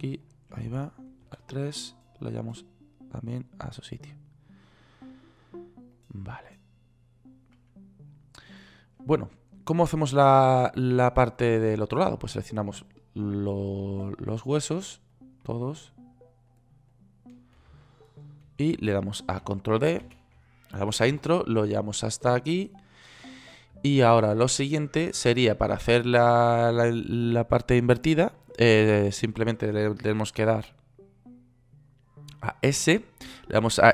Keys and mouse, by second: 1.7 KP_3, 5.7 right click, 7.0-11.9 right drag, 20.5 shift+d, 33.2 s.